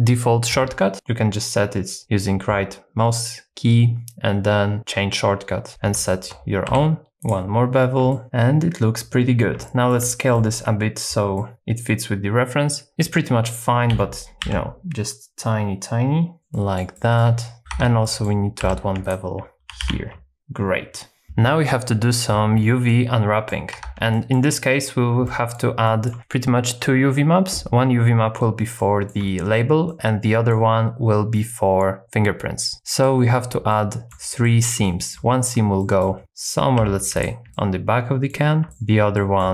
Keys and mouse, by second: 0.9-5.7 right drag, 6.0 shift+middle click, 6.7 2, 7.2 shift+click, 8.1 shift+middle click, 8.2 Tab, 9.6 shift+middle click, 10.3 shift+middle click, 11.4 shift+middle click, 13.9 s, 14.5 shift+z, 16.5 shift+middle click, 16.9 shift+middle click, 17.7 Tab, 18.0 shift+middle click, 18.6 2, 19.8 ctrl+b, 20.4 Tab, 22.9 middle click, 23.7 Tab, 24.1 shift+middle click, 25.2 middle click, 25.9 shift+middle click, 28.8 shift+middle click, 29.9 middle click, 32.7 middle click, 33.7 shift+middle click, 34.4 middle click, 34.8 shift+middle click, 35.8 shift+middle click, 36.2 middle click, 36.8 2, 37.5 middle click, 38.7 shift+middle click, 39.1 shift+middle click.